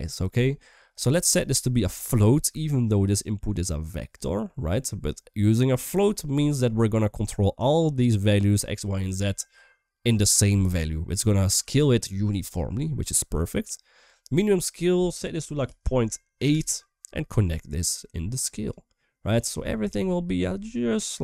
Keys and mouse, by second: 1.3 middle click, 2.2 middle click, 4.4 middle click, 5.3 middle click, 6.3 middle click, 11.1 middle click, 12.8-13.1 middle drag, 13.5 middle click, 14.2-16.3 drag, 17.0 middle click, 17.6 click, 17.8-18.5 drag, 19.5-20.1 middle drag, 20.6-21.2 middle drag.